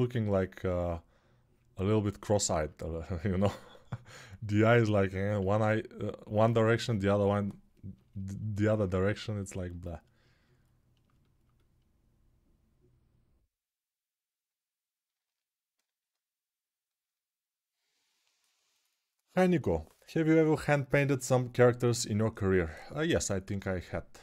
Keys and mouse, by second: 5.2 ctrl+z, 11.5-15.1 alt+right drag, 15.1-24.2 alt+drag.